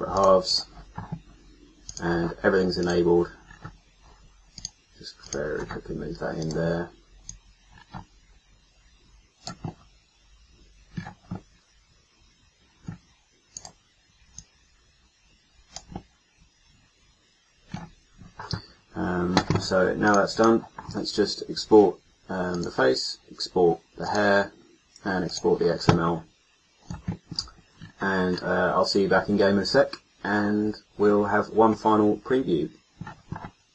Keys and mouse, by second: 3.4-5.2 middle drag, 5.7 click, 6.3-9.6 middle drag.